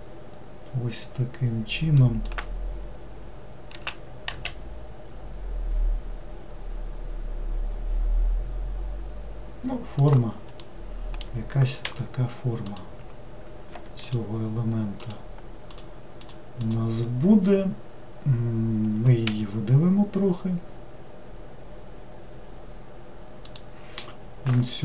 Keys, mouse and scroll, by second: 3.7 s, 10.6-11.8 middle drag, 11.8 3, 12.7 click, 14.1 shift+click, 15.0 shift+click, 15.7 shift+click, 16.2 shift+click, 16.6 shift+click, 19.3 e.